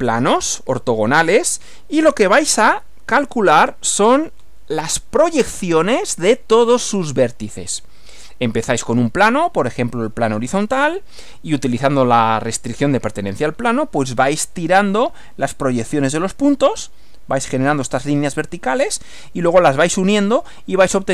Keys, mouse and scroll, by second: 2.8 Right.